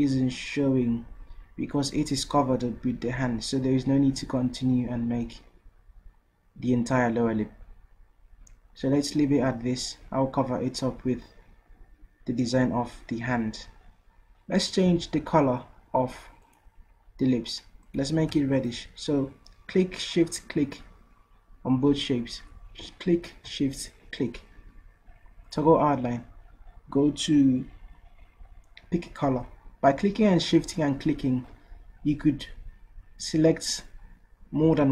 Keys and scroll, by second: 14.9 v.